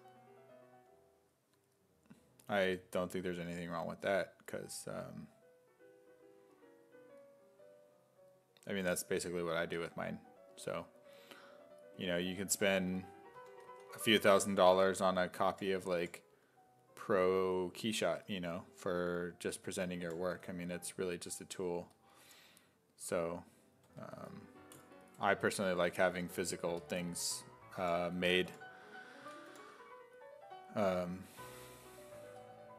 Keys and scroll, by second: 13.4-16.5 typing, 18.1 2, 20.1 5, 20.3 w, 23.9 2, 24.2 s, 26.0 2, 26.2 2, 27.6-29.5 typing, 31.3 2, 32.2 2.